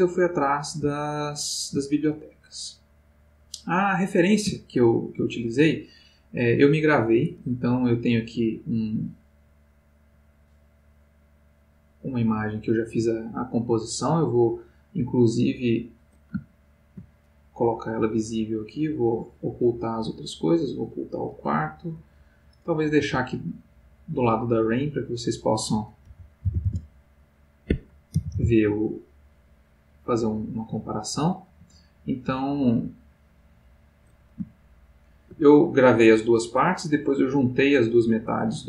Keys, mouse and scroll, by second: 1.0-2.2 ctrl+middle drag, 3.6 middle click, 4.9 ctrl+middle click, 8.0 click, 10.1 click, 15.5 click, 16.5 ctrl+middle click, 17.2 ctrl+click, 20.7 click, 22.5 click, 23.3 g, 26.0 g, 26.4 y, 27.9 Escape, 28.0-28.8 typing, 31.1 click, 31.9 g, 33.8 click.